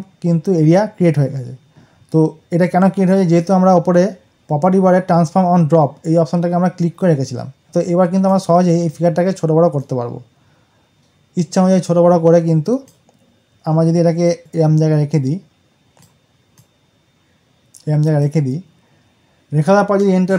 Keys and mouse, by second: 7.6-20.3 drag.